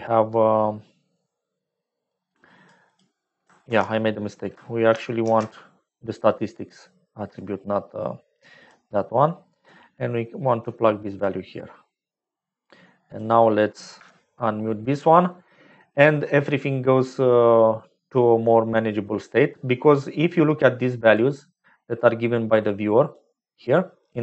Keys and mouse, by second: 1.1 click, 3.7 ctrl+x, 5.2 ctrl+shift+d, 9.6-11.3 drag, 12.1 click, 13.0 click, 14.0 m, 19.1-21.2 drag, 22.3 click, 23.2-24.2 drag.